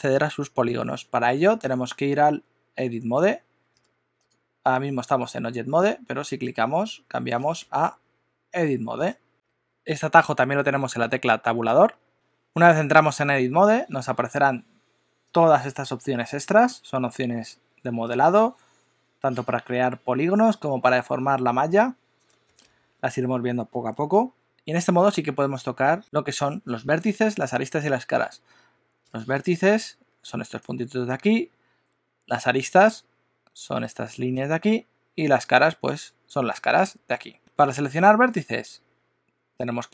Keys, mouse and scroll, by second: 6.4 click, 9.3 alt+a, 9.3 Tab, 10.0 Tab, 11.7 Tab.